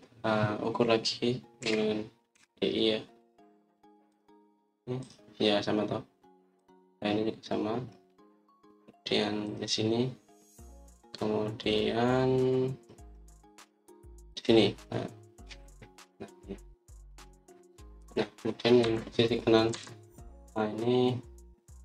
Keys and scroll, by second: 2.5-3.2 typing, 19.7 Escape, 20.6 Escape.